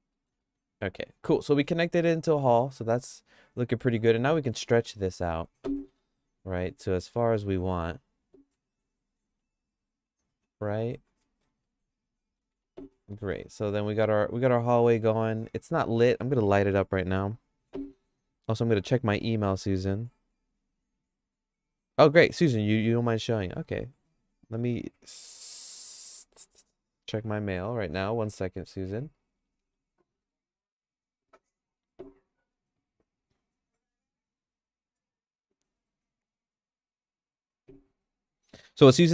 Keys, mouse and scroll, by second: 0.1 middle click, 0.5-1.7 shift+middle drag, 1.9 Tab, 2.3 middle click, 2.6-3.9 middle drag, 4.0 Tab, 4.3 middle click, 4.7 middle click, 5.1 click, 5.9 3, 6.1 click, 7.1 click, 8.5 g, 11.2 middle click, 11.6 shift+middle click, 12.5 Tab, 12.9 middle click, 13.3-16.1 shift+middle drag.